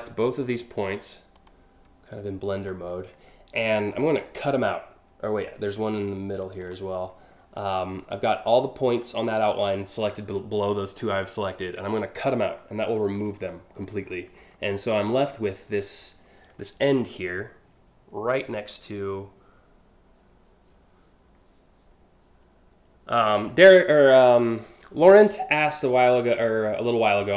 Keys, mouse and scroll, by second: 1.0 click, 2.2 shift+click, 6.2 shift+click, 7.0-7.5 scroll up 3, 8.4 scroll down 1, 12.8 ctrl+x, 13.4-14.1 scroll up 5, 25.8 alt+scroll up 1, 26.4 alt+scroll up 1.